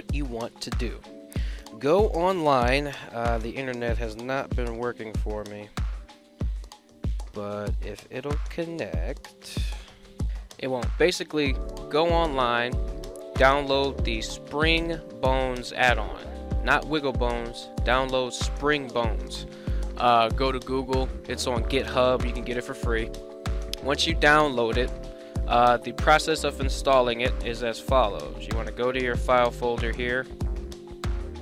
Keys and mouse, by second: 1.1 a, 1.2 a, 12.3 click, 14.2 shift+s, 16.0 shift+s.